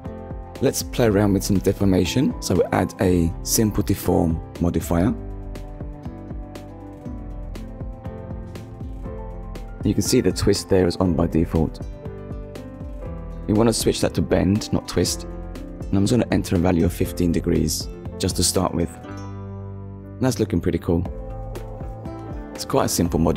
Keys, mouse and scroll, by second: 4.9 middle click, 6.8 click, 11.7 click, 12.4 middle click, 14.2 click, 15.1 1, 15.3 5, 15.4 Return, 16.4 middle click, 18.0-18.4 scroll down 2, 18.4 shift+middle click, 18.8 middle click, 20.9 click, 21.8 click, 22.3 middle click.